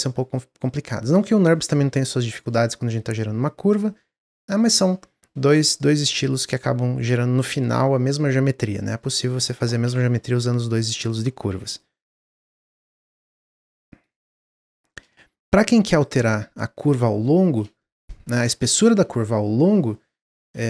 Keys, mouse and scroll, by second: 0.2-2.4 drag, 2.8-4.0 drag, 4.0-5.1 scroll down 3, 5.1-8.2 middle drag, 9.8 Tab, 11.4 x, 12.1-15.4 shift+middle drag, 15.4 Tab, 15.8 click, 16.1 Tab, 16.5 scroll up 2, 16.9-20.6 middle drag.